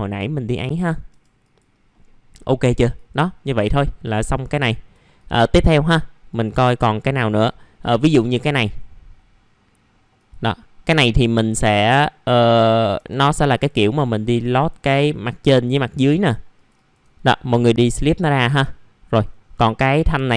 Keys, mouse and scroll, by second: 0.6 F4, 1.1 F4, 1.4 click, 1.9-2.3 scroll down 1, 2.3-2.9 scroll up 1, 2.9 click, 3.4 scroll down 1, 3.7 alt+middle click, 4.2 middle click, 4.6 alt+middle click, 5.1 click, 5.5 scroll up 1, 6.7 alt+middle click, 8.4 right click, 10.1 click, 10.5 alt+middle click, 11.1-11.6 scroll up 1, 11.6-12.0 scroll down 1, 12.1 alt+middle click, 12.6-13.3 scroll up 2, 13.3 click, 13.8 scroll down 1, 14.2 alt+middle click, 14.9 scroll up 1, 16.5 ctrl+click, 17.1 right click, 18.0 click, 18.4 scroll down 1, 18.7 alt+middle click, 19.2-20.3 scroll up 1.